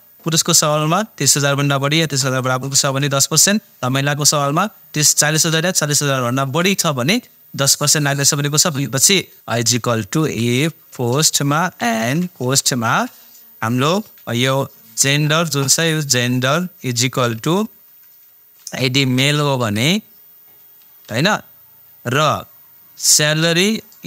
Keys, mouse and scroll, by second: 9.5-12.9 typing, 16.3 click, 17.4 =, 18.6 shift+', 19.2 shift+m, 19.6 shift+', 21.1 ,, 23.5 click.